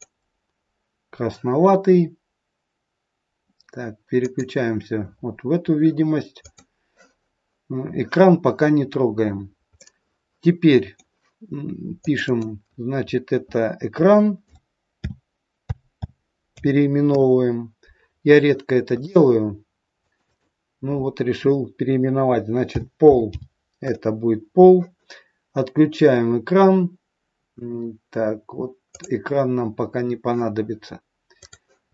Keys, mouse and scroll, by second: 4.2 click, 6.3 click, 8.8-9.6 scroll down 3, 9.7 middle click, 12.0 click, 12.3 click, 18.8 click, 19.9 click, 20.2 click, 25.7-28.9 scroll down 5, 28.9 click, 29.8-31.4 scroll up 1, 31.4 click, 31.4 scroll up 4.